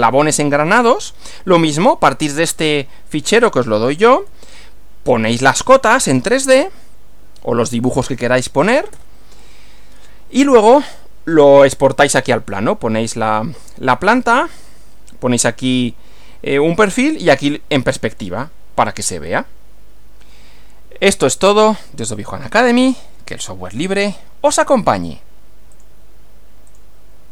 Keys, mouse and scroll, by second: 4.2 Right, 9.0 Right, 25.8 click, 26.7 click.